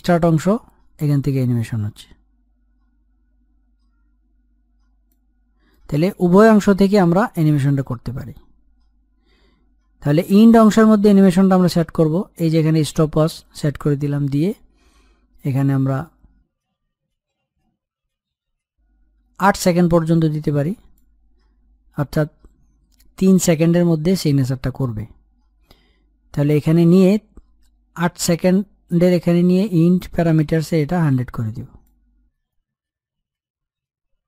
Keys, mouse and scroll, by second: 5.4-12.4 drag, 12.5 click, 15.8-23.2 drag, 30.5-34.2 drag.